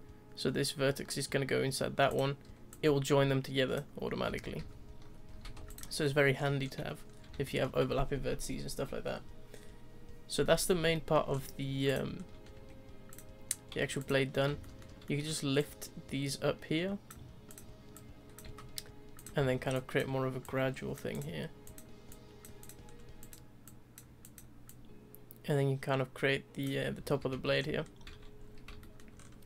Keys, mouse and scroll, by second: 2.7 click, 4.3 ctrl+z, 4.6 ctrl+z, 5.3 z, 5.5 Tab, 5.7 click, 5.9 scroll down 2, 6.0-6.5 middle drag, 6.5-7.1 scroll down 1, 7.1-7.4 scroll down 4, 7.4-11.3 shift+middle drag, 11.3-11.9 scroll up 2, 11.9 click, 12.1-12.5 scroll up 2, 12.5 Tab, 13.1 click, 14.0 shift+click, 14.4 scroll up 1, 14.6 shift+middle click, 15.6 click, 17.5 click, 17.9 click, 19.1 click, 19.4 z, 20.4 click, 21.1 click, 22.1 click, 22.6 click, 22.8-23.2 scroll up 2, 23.6 click, 24.2 click, 24.6 click, 27.0 z, 27.3 Tab, 27.5-28.8 scroll down 11, 28.8-29.1 shift+middle drag, 29.1-29.4 scroll up 4.